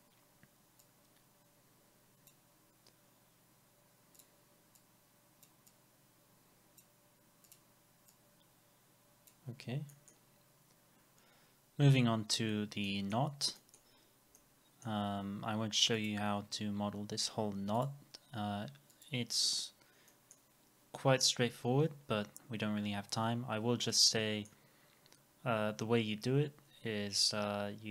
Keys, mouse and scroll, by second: 4.9 double click, 9.5 scroll down 1, 9.9 middle click, 12.3 scroll down 1, 12.9 middle click, 13.3 scroll down 1, 13.6 middle click, 13.9 scroll up 1, 14.4 alt+middle click, 19.7 scroll up 1, 20.1 middle click, 24.1 middle click.